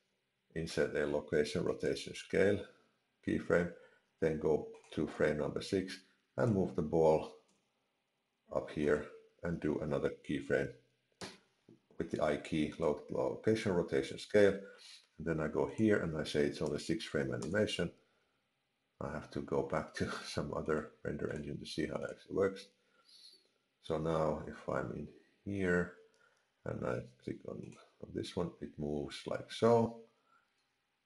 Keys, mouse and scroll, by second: 4.8 click, 6.3 click, 7.5 g, 11.2 i, 15.7 click, 20.6 click, 21.3 click, 27.6 click.